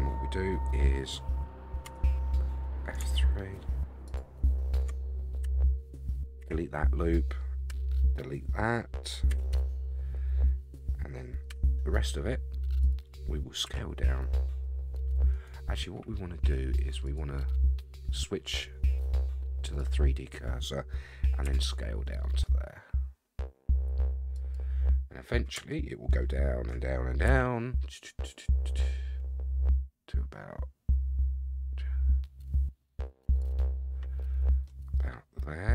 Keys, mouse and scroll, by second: 1.9 3, 4.1 alt+click, 5.4 x, 7.7 l, 9.3 x, 11.5 l, 11.5 ., 13.8 s, 17.0-19.9 drag, 21.4 s, 24.8-25.5 scroll up 7, 26.2 shift+middle click, 27.3 s, 33.8-34.6 scroll up 4, 34.6-35.7 middle drag.